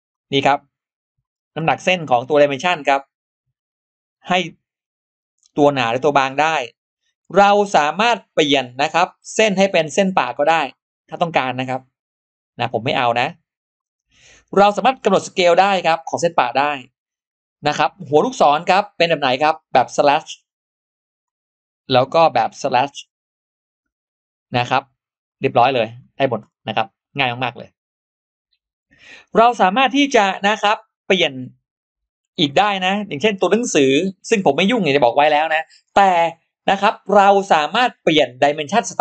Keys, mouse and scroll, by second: 1.1-1.4 scroll up 2, 1.6 click, 2.0 scroll down 2, 3.0 click, 4.6 click, 5.4 click, 8.6 click, 9.9 click, 10.4 click, 11.4 click, 12.8 click, 13.6 click, 15.4 click, 16.0 click, 17.8 click, 21.0 click, 22.1 click, 23.6 click, 25.1 click, 25.5 scroll down 2, 26.3 scroll down 2, 26.7 scroll up 2, 31.1 click, 37.8 click.